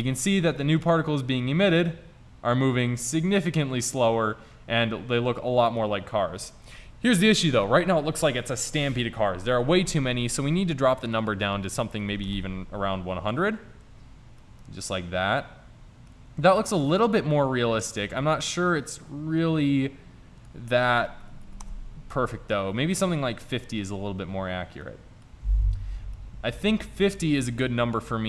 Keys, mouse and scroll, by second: 4.4-5.7 scroll up 1, 5.7-7.5 middle drag, 11.2 click, 12.3 KP_0, 14.2-15.5 middle drag, 20.5-22.5 drag, 23.4-23.8 middle drag, 23.8 click.